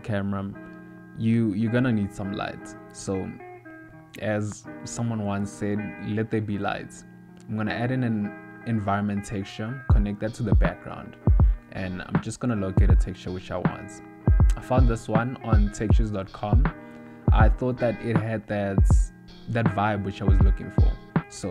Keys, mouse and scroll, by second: 0.2 scroll down 1, 0.3-1.4 scroll up 1, 1.7 middle click, 4.1 click, 4.3 shift+a, 7.6 click, 8.3 click, 9.7 ctrl+middle click, 11.6 click, 15.4 click.